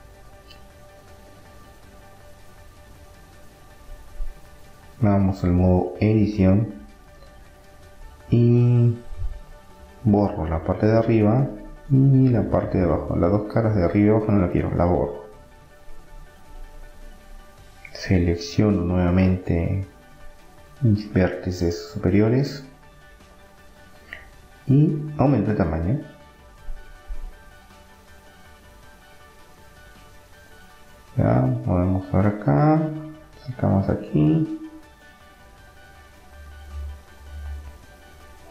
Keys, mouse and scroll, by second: 0.6-4.1 middle drag, 4.1-6.5 drag, 6.5-8.6 middle drag, 8.6-11.1 drag, 9.3-10.5 right drag, 10.5 Delete, 11.1 middle click, 11.8-13.3 middle drag, 13.3-15.1 drag, 13.8 Delete, 15.1 middle click, 16.8-18.6 drag, 18.7-21.4 middle drag, 21.6-23.4 right drag, 23.4 KP_3, 25.1-27.1 drag, 28.8-31.8 middle drag, 30.0 Tab, 31.8-33.6 drag, 35.1 s.